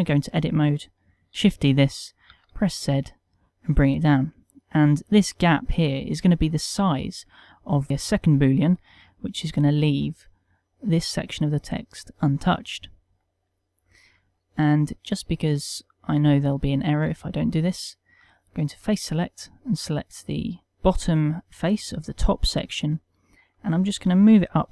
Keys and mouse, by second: 1.3 shift+d, 4.7 click, 13.7 middle click, 15.0 ctrl+middle click, 17.0 ctrl+Tab, 19.2 click, 20.5 click, 20.6 click, 20.6 middle click, 21.3 ctrl+middle click, 22.3 middle click, 23.0 ctrl+middle click.